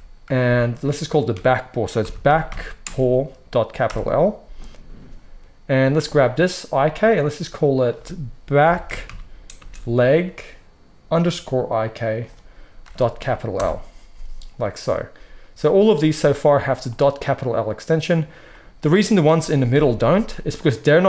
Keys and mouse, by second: 6.0-7.0 middle drag, 7.0-16.3 drag, 16.3 middle click, 16.8 click, 16.9 middle click, 17.1 click, 17.2-20.7 middle drag, 19.6 KP_1, 20.7-21.0 drag.